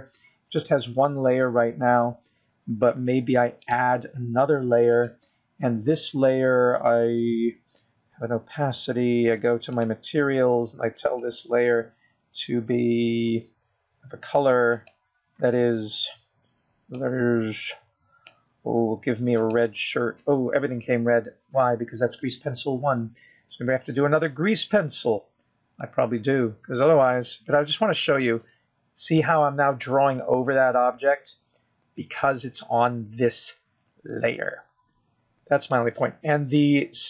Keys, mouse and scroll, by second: 6.0 click, 7.3 click, 12.1 click, 13.4 click, 17.1 click, 28.2 click.